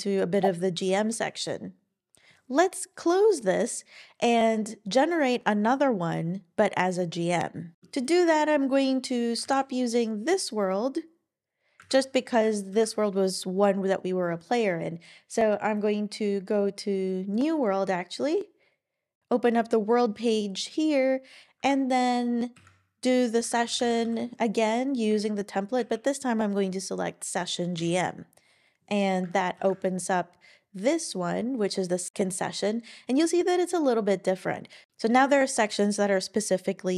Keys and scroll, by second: 0.9 Down, 9.5 super+w, 11.8 super+w, 12.7 ctrl+super+l, 19.2 super+BackSpace, 22.5 super+p, 23.2-24.5 typing, 25.1 Down, 25.8 Up, 29.6 ctrl+super+l.